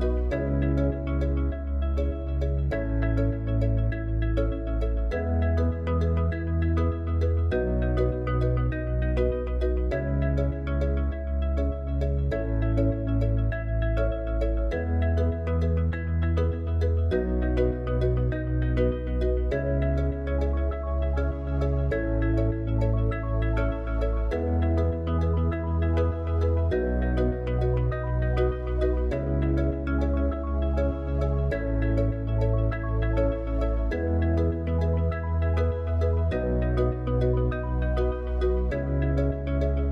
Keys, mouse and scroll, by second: 1.7 click, 2.5 click, 5.5-9.1 drag, 10.4-13.3 drag, 15.0 shift+click, 17.7 shift+d, 22.3 middle click, 24.6 click, 30.3 r, 33.9 g, 36.5 middle drag, 38.6 r.